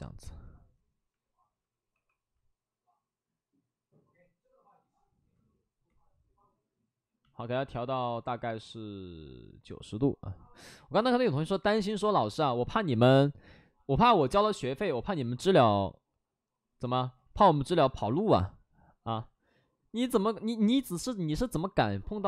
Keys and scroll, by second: 1.8 w, 17.1 ctrl+z, 19.0 ctrl+z.